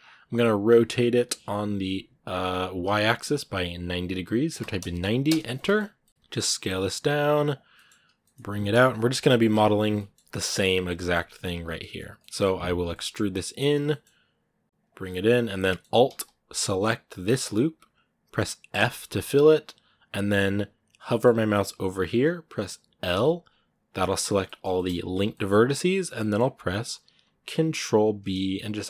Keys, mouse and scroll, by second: 0.5 r, 5.3 middle click, 5.6 scroll up 1, 5.8 middle click, 6.1 s, 7.5 middle click, 7.8 scroll down 1, 8.0 g, 9.0 KP_Decimal, 9.6 scroll down 1, 9.8 middle click, 10.2 g, 10.8 middle click, 11.0 s, 12.0 middle click, 12.2-12.6 scroll up 1, 12.6 e, 14.9-17.0 middle drag, 17.0-18.6 alt+right drag, 18.6 f, 20.9-22.9 middle drag, 22.9 l, 24.2-25.5 middle drag, 25.5-26.0 scroll up 1, 26.0-27.4 middle drag, 27.4 ctrl+b.